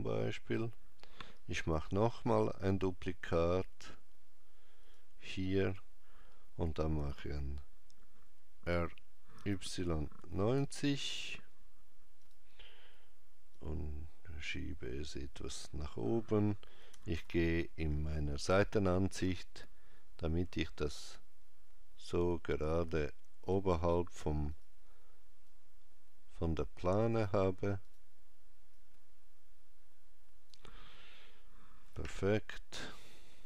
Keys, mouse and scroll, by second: 1.5 shift+d, 6.7 r, 13.3 click, 16.7 KP_1, 16.9 KP_5, 20.1 click, 24.3 click, 25.3 click, 31.7 KP_5.